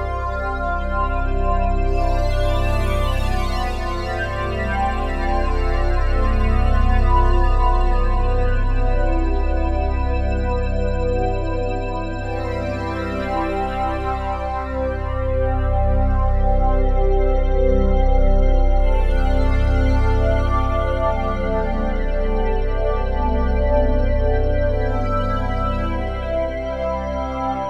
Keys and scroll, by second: 19.4 s.